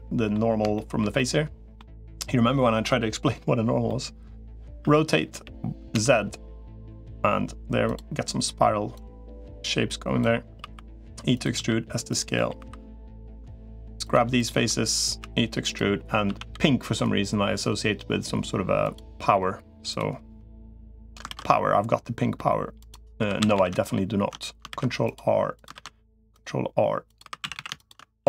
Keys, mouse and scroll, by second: 0.5 shift+middle click, 0.9 middle click, 3.7 middle click, 4.7 r, 8.9-10.1 drag, 10.5 e, 11.3 s, 12.1 middle click, 12.5 3, 15.1 e, 16.1 a, 16.3 g, 19.7 click, 20.6 middle click, 21.1 ctrl+r, 23.1 3, 23.3 a, 24.5 ctrl+r, 25.5 ctrl+r, 27.1 3, 27.3 a, 28.1 alt+s.